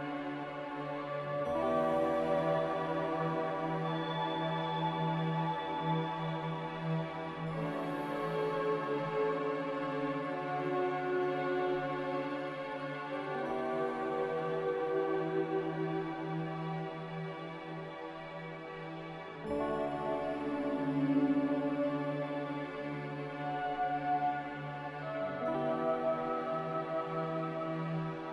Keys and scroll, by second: 4.9 Escape, 5.0 Escape, 8.2 z, 20.9-21.8 typing, 26.0 c.